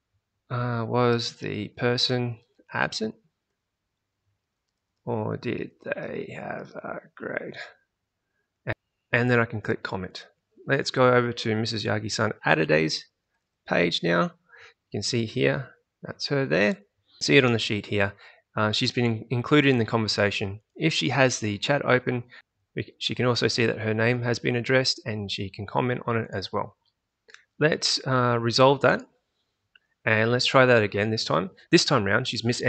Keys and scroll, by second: 0.0-8.7 typing, 13.4 alt+Tab, 27.1 alt+Tab.